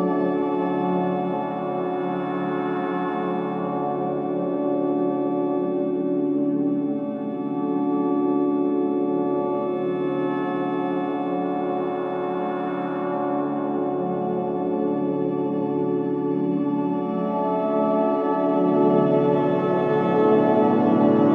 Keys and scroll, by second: 5.5 4, 8.1 ctrl+d, 8.2 Escape, 12.2 3, 14.8 ctrl+d, 15.0 Escape, 15.9 Escape, 16.0 ctrl+z, 17.2 Escape, 20.2 ].